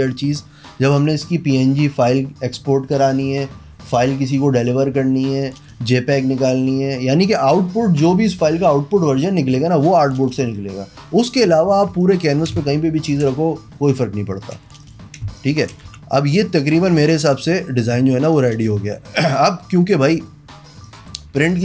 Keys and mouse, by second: 11.8 z, 12.2 alt+click, 12.7 space, 12.9 click, 15.0 drag, 15.4 space, 15.7 drag, 16.1 v, 16.4 click, 17.4 click, 18.5 click, 18.7 click, 21.0 click.